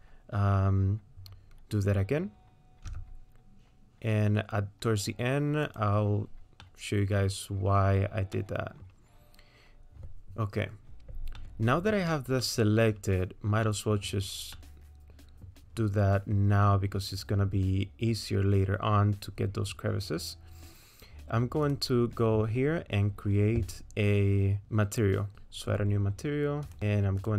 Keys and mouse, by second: 2.9 e, 6.6 middle click, 8.3 middle click, 11.4 middle click, 12.4 middle click, 13.6 middle click, 14.5 middle click, 21.6 click.